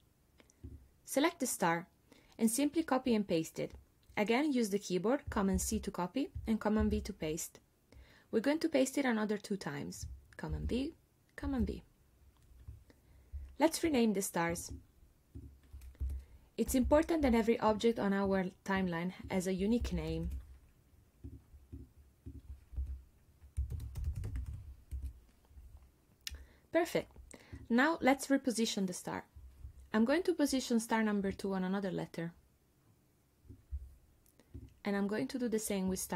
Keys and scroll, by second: 5.6 super+c, 6.8 super+v, 10.5 super+v, 16.0 BackSpace, 16.7 2, 16.9 Return, 19.8 BackSpace, 20.1 3, 20.3 Return, 22.8-25.0 typing.